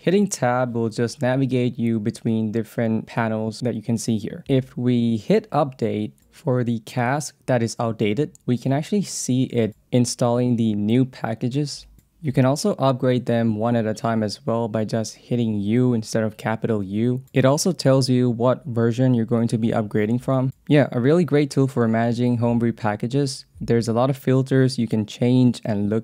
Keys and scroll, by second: 0.2 j, 2.7 i, 3.0 BackSpace, 4.4 o, 5.9-6.8 typing, 8.7 u, 12.0 j, 12.6 k, 13.2 j, 14.0 k, 23.8 j, 24.4 k, 24.8 j.